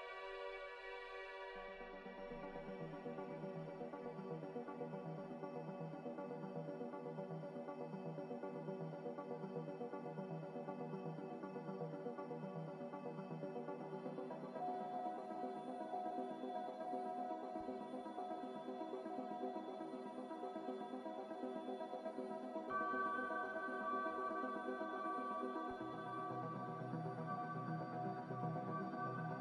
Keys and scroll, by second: 9.5 ctrl+c, 17.4 n, 22.0 4, 24.6 Escape, 28.0 ctrl+z.